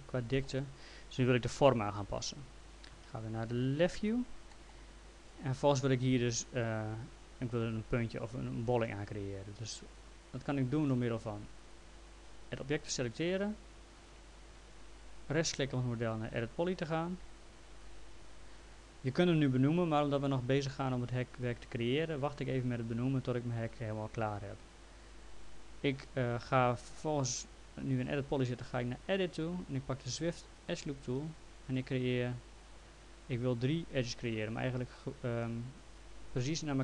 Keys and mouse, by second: 2.9 f, 3.9 l, 4.5 middle click, 11.6 click, 15.6 right click, 17.8 click, 29.0 click.